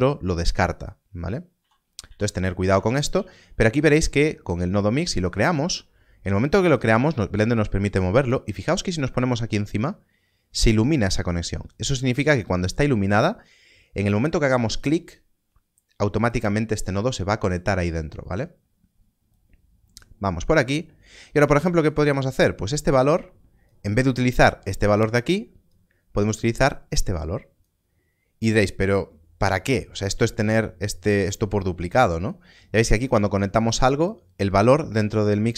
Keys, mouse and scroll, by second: 1.5 ctrl+z, 2.0 ctrl+z, 3.1 shift+a, 14.7 click, 19.3 click, 22.2 click, 32.0 click.